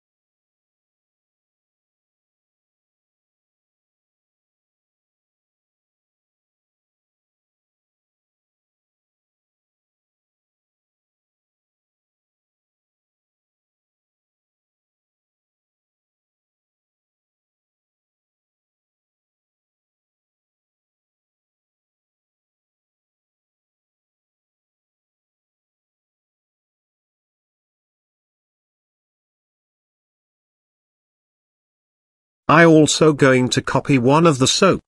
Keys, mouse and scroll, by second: 1.5 r, 4.4 KP_3, 5.6 g, 7.9 shift+middle drag, 8.5-8.9 middle drag, 9.9 KP_1, 10.6-11.1 shift+middle drag, 11.7-12.1 shift+middle drag, 12.7 s, 13.6 g, 16.7 g, 18.6 middle drag, 19.3 shift+scroll up 1, 19.6 z, 20.3 scroll up 1, 20.5-21.7 middle drag, 22.1-22.6 shift+middle drag, 23.4 g, 25.4-25.9 shift+middle drag, 26.4 click, 27.3 shift+click, 29.7 shift+d, 31.6 KP_Decimal, 32.2-32.6 middle drag, 32.7 middle drag, 33.6 click, 33.9 click, 34.4 Tab.